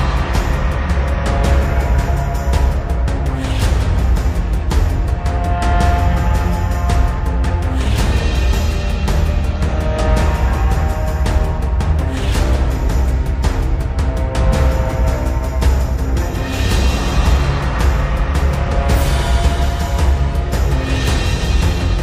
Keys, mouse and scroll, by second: 2.5 click, 7.3-8.3 shift+click, 9.0 right click, 10.1 click, 10.8 scroll up 1, 11.7-13.9 drag, 18.0-19.1 click.